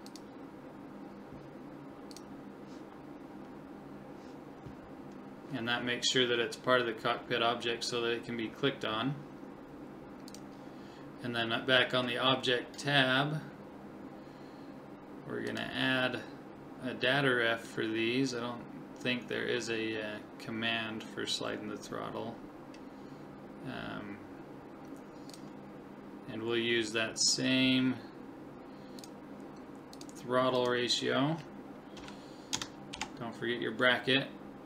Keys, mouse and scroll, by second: 0.1-1.9 drag, 10.3 click, 13.2-15.1 middle drag, 15.5 click, 25.3 click, 29.0-31.7 drag.